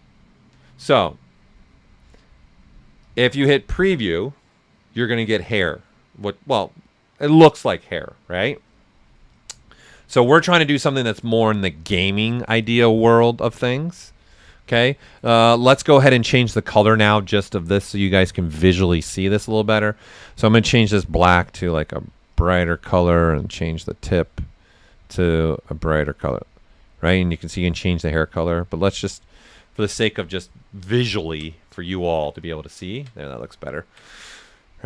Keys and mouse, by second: 3.0 click, 9.5 click, 9.6 ctrl+right click, 10.2 typing, 20.0 click, 20.0 typing, 31.1 ctrl+right click, 31.9 alt+right click, 33.6 ctrl+right click.